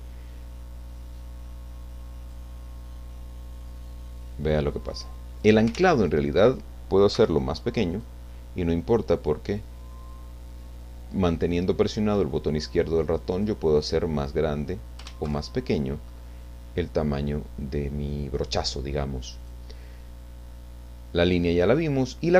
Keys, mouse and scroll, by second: 1.8 click, 2.9-5.7 drag, 5.7 ctrl+z, 7.1 f, 7.9 click, 8.8-13.6 drag, 14.0 middle click, 14.4-15.0 scroll up 1, 15.3 ctrl+z, 16.4 middle click, 19.4 click.